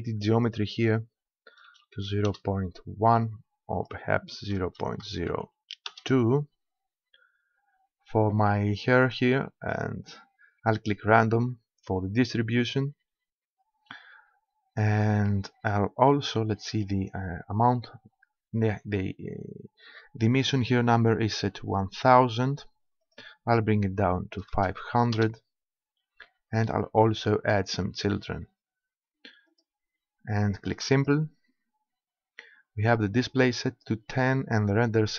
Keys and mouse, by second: 0.4-2.1 drag, 3.7-5.5 drag, 7.2-8.9 middle drag, 11.1-12.9 drag, 13.1-19.3 middle drag, 23.0-24.8 drag, 26.0-29.5 middle drag, 29.5-32.7 drag.